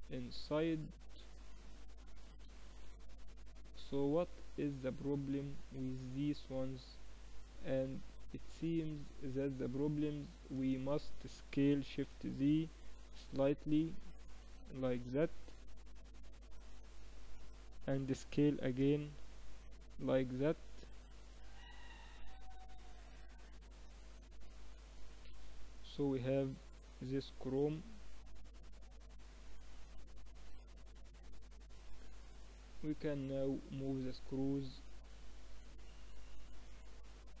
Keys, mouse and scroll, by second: 0.0-2.8 drag, 1.9 t, 2.5-3.6 middle drag, 2.9 Tab, 3.6 click, 4.1 middle click, 4.6 middle click, 9.7 Tab, 10.1 a, 11.1 a, 11.1 s, 18.1 s, 25.3-26.8 middle drag, 25.9 Tab, 26.8 click, 27.6-29.3 middle drag, 31.2-32.5 middle drag, 33.7-35.4 middle drag, 36.3 middle click, 36.6 middle click, 37.1 z.